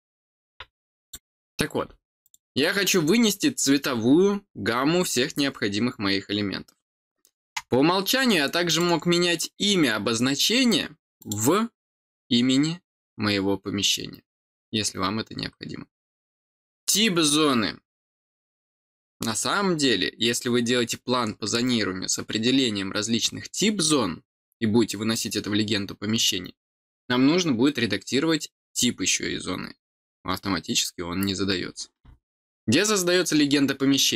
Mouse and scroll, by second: 1.0 click, 2.2 click, 2.6 middle click, 8.6 click, 11.1 click, 15.9 click.